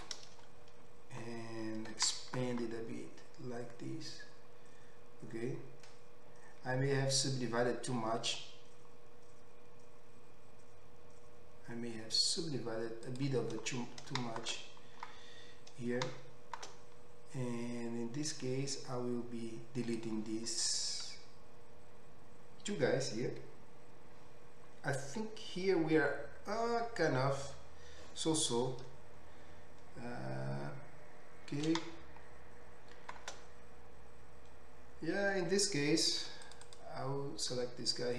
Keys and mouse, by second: 2.5 s, 13.2-14.9 middle drag, 15.0 middle click, 15.3 middle click, 16.2 shift+middle click, 16.8-18.4 middle drag, 18.4-36.9 drag, 36.8 2, 36.9-38.1 middle drag.